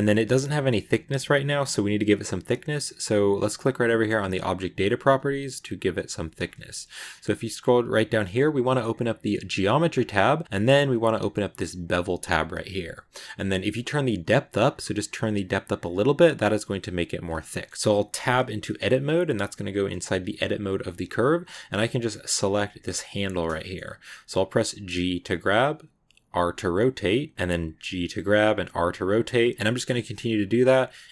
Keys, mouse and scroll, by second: 4.2 click, 5.7-6.8 drag, 6.8-8.8 scroll down 2, 8.8 click, 9.7 scroll down 3, 11.6 click, 12.6 scroll down 2, 13.8-17.4 drag, 17.4 middle click, 17.7 Tab, 18.0 Tab, 18.7 a, 21.8 right click, 23.4 shift+middle click, 24.4 g, 27.3 shift+middle click, 27.6 r, 29.1 middle click, 29.9 g, 30.4 middle click.